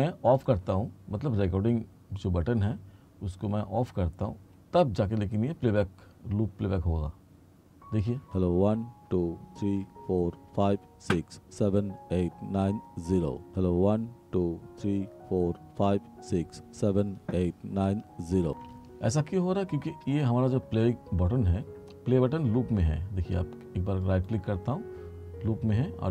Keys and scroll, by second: 8.3 space, 18.6 space.